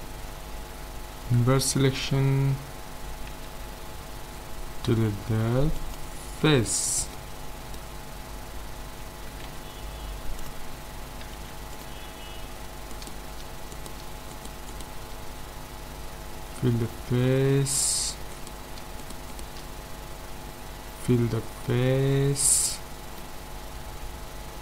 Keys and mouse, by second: 1.2 ctrl+i, 3.3 x, 7.1-10.5 middle drag, 9.4 ctrl+Tab, 11.3 ctrl+s, 12.9-16.4 right drag, 16.6 f, 18.3-21.1 right drag, 20.7 f, 21.7-24.6 middle drag.